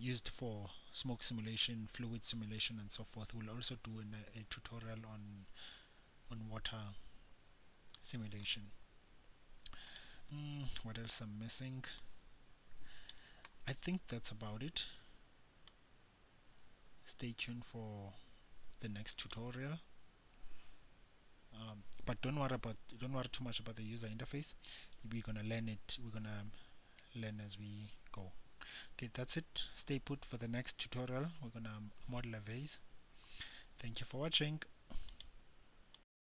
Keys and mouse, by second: 10.2-13.9 drag, 16.0-34.6 drag.